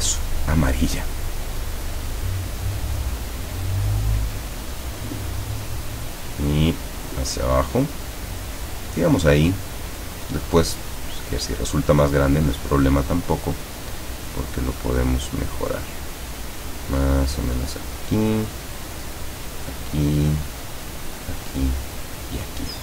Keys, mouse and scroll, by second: 4.7 click, 6.5 click, 9.0 click, 15.8 click, 18.1 click, 19.7 click, 21.2 click, 22.1 click.